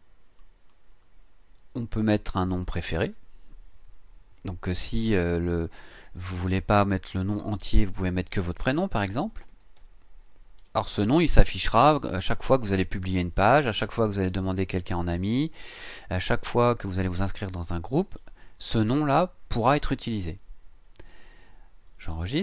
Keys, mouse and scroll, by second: 0.4 click, 1.5-2.0 scroll down 2, 2.5 click, 3.0-3.5 scroll up 2, 7.8-11.6 typing, 20.7-21.2 scroll down 2, 21.2-21.6 scroll up 2, 21.8-22.2 scroll down 2.